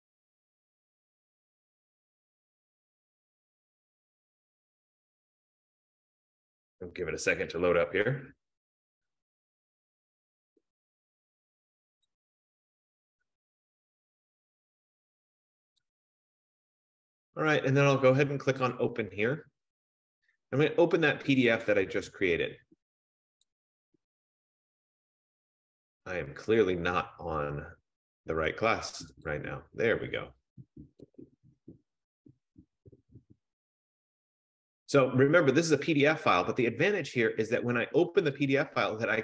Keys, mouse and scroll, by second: 0.8 F15, 16.0 click, 18.9 click, 21.7 click, 23.6 click, 23.8 click, 24.9 click, 25.3 click, 27.8 click, 29.3 click, 29.7 click, 31.3 click, 31.5 click, 32.8 click, 33.2 click, 34.6 click, 38.5 click.